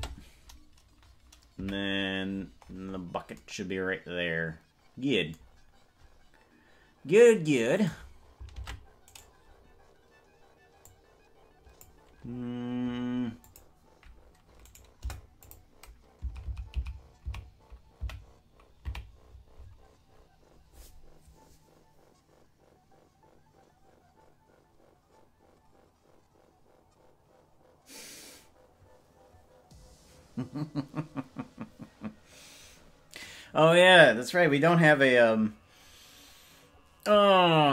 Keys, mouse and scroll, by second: 0.1 space, 1.7 KP_Decimal, 2.5-3.3 scroll down 16, 8.1 right click, 8.7 ctrl+Tab, 9.3 right click, 10.9-11.9 drag, 13.5 click, 14.7 right click, 15.1 Delete, 16.5 Left, 16.7 Left, 16.9 Left, 17.5 Left, 18.3 Right, 19.1 Left, 19.3-20.1 scroll up 14.